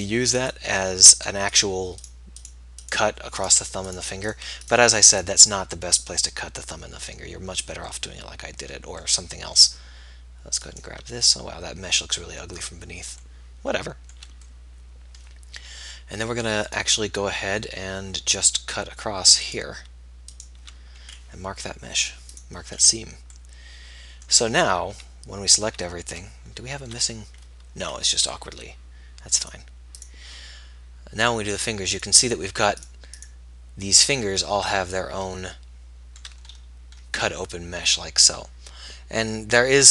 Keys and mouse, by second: 4.3 shift+click, 10.8-12.6 middle drag, 16.9-18.9 middle drag, 22.2 middle click, 22.4-23.9 drag, 25.1 a, 25.9 a, 28.4 a, 29.6-34.1 drag.